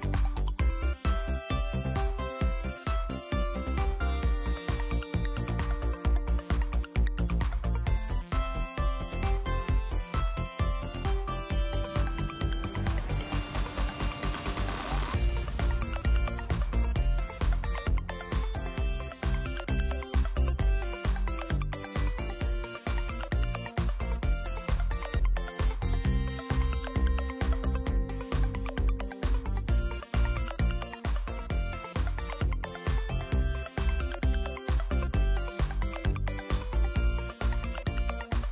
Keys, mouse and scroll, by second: 8.3-10.3 drag, 11.9 click, 14.7 click, 15.8 click, 18.1 click, 19.3 click, 19.9-21.7 drag, 22.9 ctrl+z, 26.5 click, 28.7 click, 29.7 click, 30.9 click, 32.0 click, 35.1 click, 37.1 click.